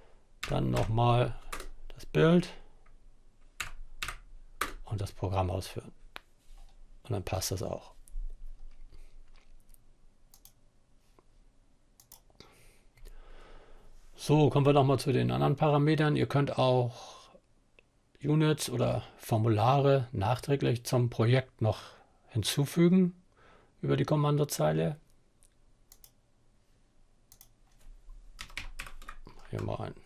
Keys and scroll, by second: 0.7 Return, 2.9 Up, 3.3 Up, 3.7 Return, 27.2-28.7 typing, 29.0 Return.